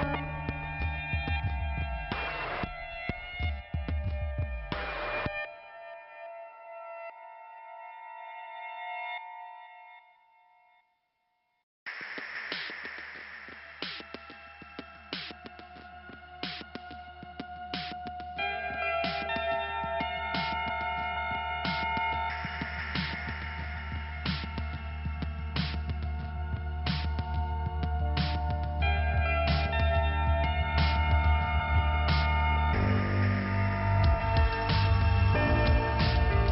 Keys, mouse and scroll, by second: 0.8 click, 1.6 middle click, 2.6 click, 6.0-6.6 scroll up 1, 8.1 click, 9.7 click, 10.8 click, 11.3 middle click, 13.6 click, 14.3 scroll down 1, 16.5 click, 16.9-17.4 scroll up 1, 17.8 scroll up 2, 20.0 click, 20.9 scroll down 2, 23.3 click, 27.3 click, 29.3-29.9 scroll down 1, 30.0-30.5 scroll up 1, 31.2 click, 32.1 click, 33.5 click.